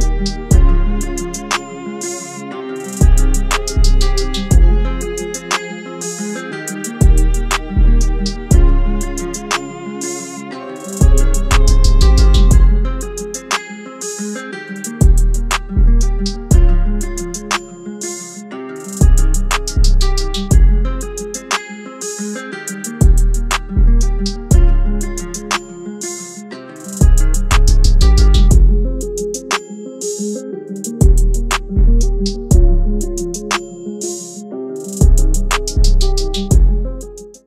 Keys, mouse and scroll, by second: 11.9 double click.